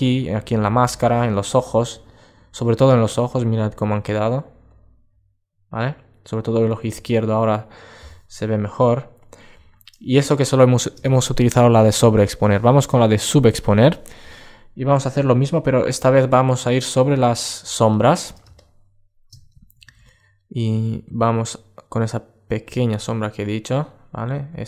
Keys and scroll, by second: 2.8 super+space, 17.3 super+space.